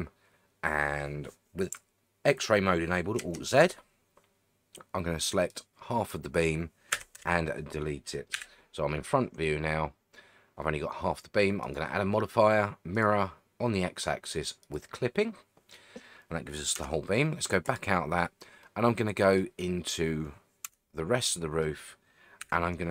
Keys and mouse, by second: 3.2 alt+z, 5.5 click, 6.9 x, 8.3 KP_1, 14.6 click, 16.8 Tab, 18.6-19.4 middle drag, 20.6 Tab, 21.3 middle click, 22.4 KP_1.